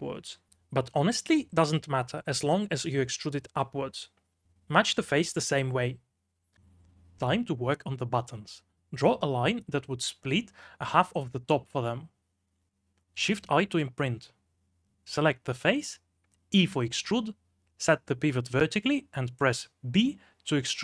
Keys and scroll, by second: 0.6 v, 3.4 b, 4.5-7.2 typing, 9.0 m, 10.9 shift+a, 12.0 g, 13.6-16.9 typing, 18.8-20.0 typing.